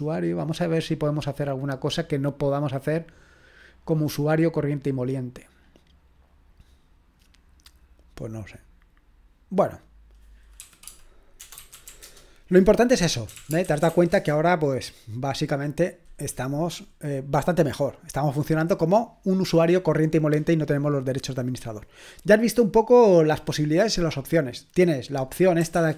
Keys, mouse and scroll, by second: 5.8-6.8 drag, 7.2-10.6 drag, 10.6-14.4 typing, 25.6-25.9 typing, 25.7 Caps_Lock.